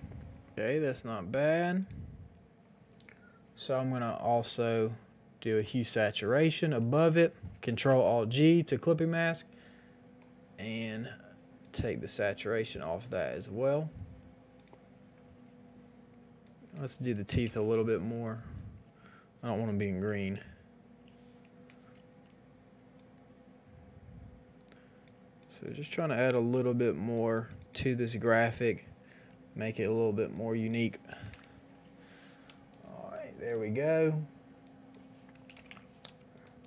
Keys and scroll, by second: 0.5 x, 7.7 ctrl+alt+g, 17.4 KP_0, 17.5 KP_5, 17.6 Return, 18.8 b, 20.1 [, 31.3 Return, 31.3 KP_5, 32.5 space, 35.5 KP_5, 35.6 KP_0, 35.6 Return, 36.1 space.